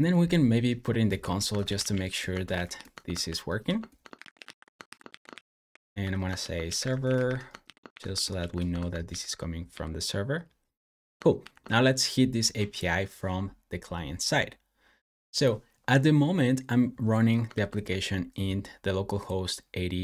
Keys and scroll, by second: 0.8-8.0 typing, 8.2 super+s, 8.5 Escape, 8.9 super+j, 9.5 super+j, 11.3 shift+super+[, 17.4 super+j.